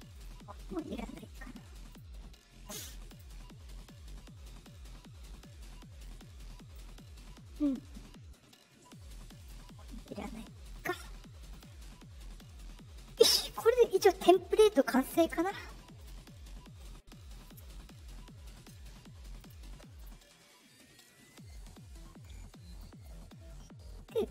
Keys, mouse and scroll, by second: 0.1 right click, 1.8 click, 3.0 click, 6.0 click, 9.3 right click, 10.7 click, 11.5 click, 13.1 click, 15.1 click, 15.9 click, 19.3 click, 19.9 click.